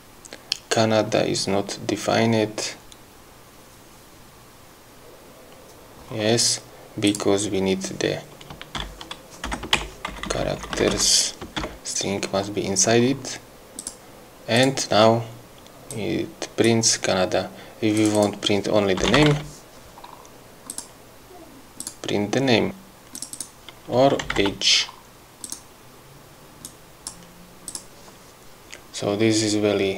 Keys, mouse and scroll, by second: 7.4 click, 9.8 BackSpace, 10.4 shift+Right, 14.1 click, 14.9 click, 16.2 click, 18.3 click, 19.1-20.1 typing, 21.0 click, 22.1 click, 23.5 click, 24.2-25.2 typing, 25.8 click, 27.0 click, 28.1 click.